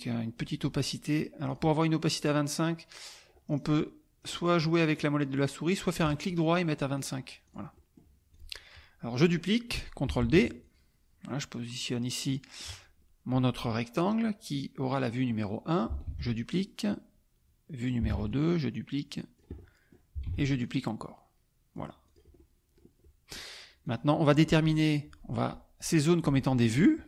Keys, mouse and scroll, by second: 0.4 right click, 1.4 click, 3.3 scroll up 1, 3.4-4.2 scroll down 1, 4.2-4.8 scroll down 1, 4.8-6.0 scroll down 1, 6.0 right click, 6.9 click, 7.5 click, 8.0 middle click, 8.4 click, 10.2 ctrl+d, 10.6-12.1 ctrl+drag, 12.2 click, 16.0 ctrl+d, 16.5-18.0 ctrl+drag, 18.1 ctrl+d, 18.3-19.5 ctrl+drag, 20.0 click, 20.3 ctrl+d, 20.6-21.9 ctrl+drag, 22.0 click, 22.4 click, 23.0 click, 23.8 click.